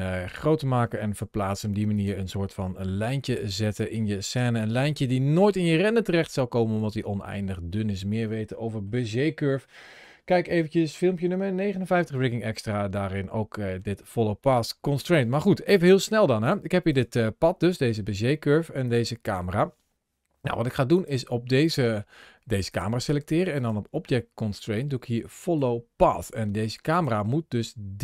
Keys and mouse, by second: 0.0 middle click, 1.0 g, 1.8 click, 2.9 r, 3.5 click, 4.2 Tab, 4.7 middle click, 5.5-8.7 middle drag, 12.9 middle click, 14.4 middle click, 16.3 click, 16.7 click, 18.7 click, 22.5 click, 23.4-25.5 drag.